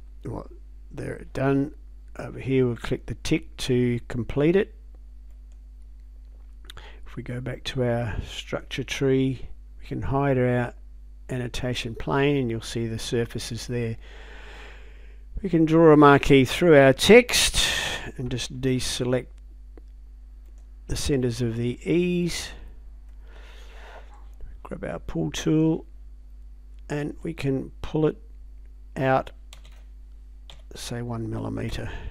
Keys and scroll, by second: 29.6 space, 30.5 1, 31.7 Return.